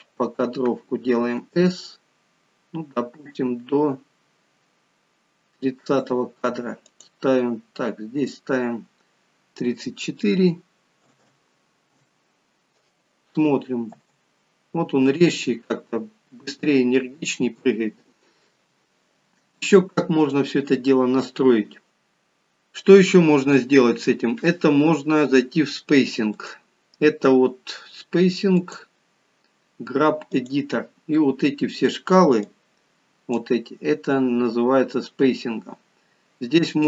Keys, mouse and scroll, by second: 1.3 s, 13.9 space, 28.6 click, 30.5 click.